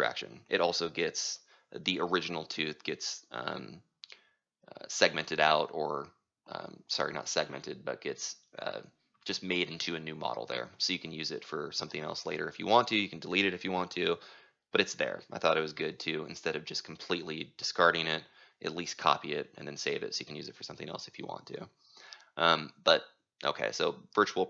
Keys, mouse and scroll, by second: 2.1 click, 3.1-8.2 drag, 8.2-13.2 right drag, 13.2-14.8 middle drag, 13.2-14.3 scroll, 14.8-19.9 right drag, 21.4-24.4 drag.